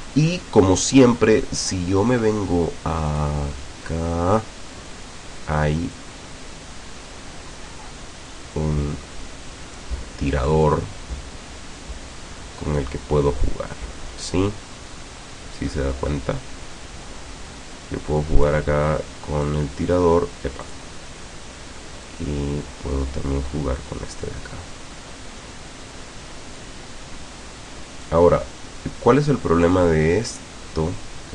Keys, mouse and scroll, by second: 0.4-0.8 ctrl+scroll down 2, 1.1-1.6 ctrl+scroll up 2, 3.1 click, 6.0-10.0 drag, 10.7-18.7 drag, 19.5 click, 20.7 click, 22.1-26.8 drag, 28.1-31.3 drag.